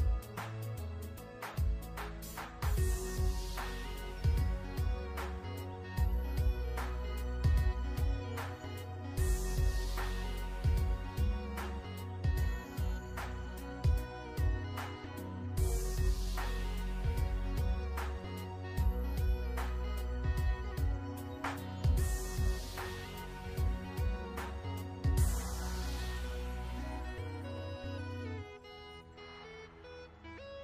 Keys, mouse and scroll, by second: 0.6 scroll up 1, 1.9 alt+scroll up 1, 2.6 ctrl+d, 2.7 typing, 3.2 click, 19.9 alt+shift+scroll down 1, 21.4 ctrl+scroll down 1.